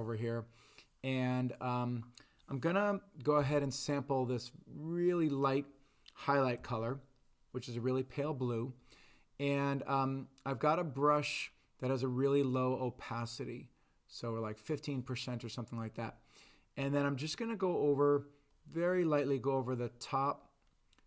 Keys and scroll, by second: 3.4 i, 6.6 b.